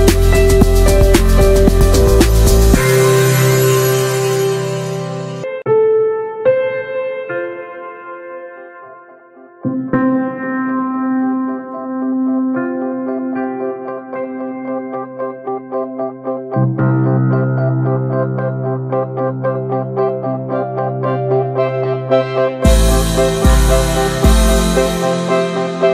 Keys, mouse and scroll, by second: 0.4 Tab, 0.4 click, 0.7 ctrl+a, 1.1 drag, 1.3 scroll down 1, 1.8 alt+middle click, 2.6 shift+a, 3.1 scroll down 2, 3.5-3.9 shift+middle drag, 3.9 click, 4.4-4.8 scroll up 3, 4.6 shift+middle click, 4.8 s, 5.9 alt+middle click, 6.1 alt+middle click, 6.6 s, 8.4 alt+middle click, 8.6 scroll up 3, 8.7-9.3 alt+middle drag, 9.3 ctrl+a, 9.6-10.1 shift+middle drag, 10.1-11.1 right drag, 11.1 s, 12.2 click, 12.7 ctrl+a, 13.2 shift+middle click, 13.5 ctrl+s, 16.0-17.5 drag, 18.5-21.9 drag, 21.9 Tab, 22.0 middle click, 22.8 n, 23.2 alt+middle click, 23.7 click, 24.0 l, 24.4 alt+middle click, 24.9 s.